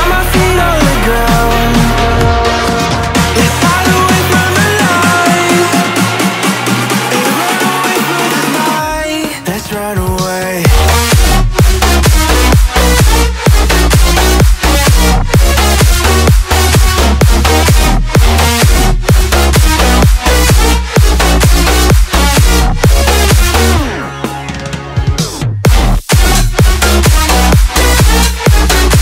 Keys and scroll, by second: 0.2 ctrl+z, 3.1 space, 6.4 space, 11.0 Return, 14.2 Left, 14.9 Return, 16.9 space.